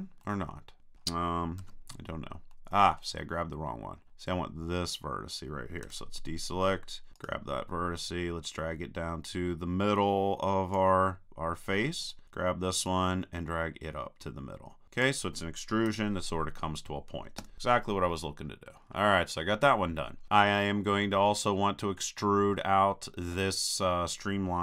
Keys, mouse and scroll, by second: 0.2 middle click, 1.1-2.9 middle drag, 1.6 super+z, 4.1-5.9 middle drag, 5.9 a, 8.5-10.4 drag, 8.5-9.6 right drag, 12.0-14.7 right drag, 12.9 click, 15.9 a, 17.4 KP_3, 18.1 middle click, 18.7 middle click.